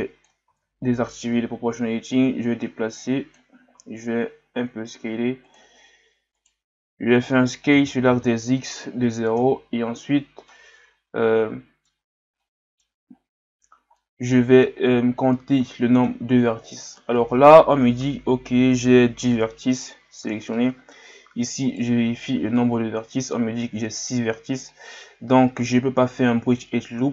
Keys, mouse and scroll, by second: 0.5 ctrl+z, 1.3 o, 2.1 click, 3.8 s, 6.3 alt+right click, 10.5-12.1 middle drag, 12.1 scroll down 1, 12.4 middle click, 13.1-13.6 scroll up 3, 14.0-15.0 middle drag, 15.0-15.3 scroll down 2, 15.3-18.3 middle drag, 20.5-21.7 middle drag, 21.7 alt+right click, 24.7-27.1 middle drag.